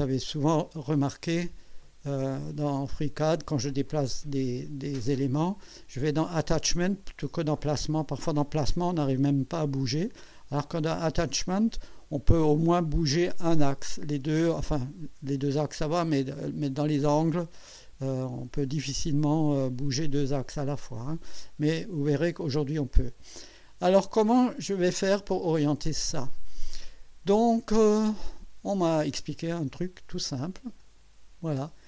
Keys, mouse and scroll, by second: 0.2 click, 1.8 click, 4.7 click, 12.8 click, 17.7 scroll down 1, 19.3 click, 24.9-25.3 scroll down 2, 30.8 click.